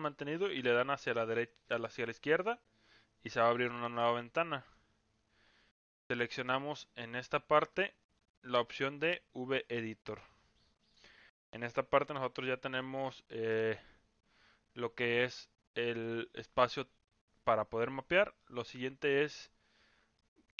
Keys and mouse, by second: 5.9-7.1 drag, 7.9-9.7 drag, 12.1 n, 13.7 n, 18.3-19.1 middle drag, 20.1-20.5 middle drag.